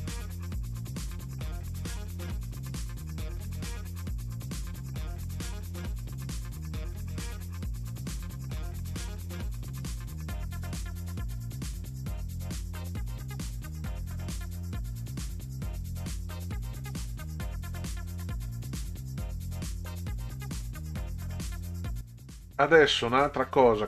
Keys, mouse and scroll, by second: 5.0-6.7 drag, 7.7 click, 9.2 click, 11.8 click, 13.6 click, 15.4 ctrl+scroll down 2, 17.4 ctrl+scroll down 2, 20.5-21.1 middle drag, 22.7 middle click.